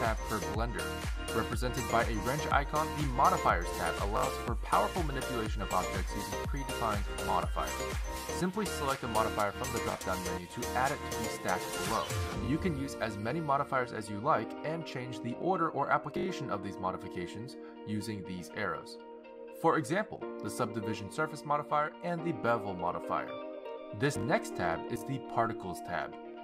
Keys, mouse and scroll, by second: 4.2 click, 12.6 click, 15.7 click, 16.9 click, 17.7 click, 21.0 click, 21.8 click, 22.8 click, 23.2 click, 24.7 click.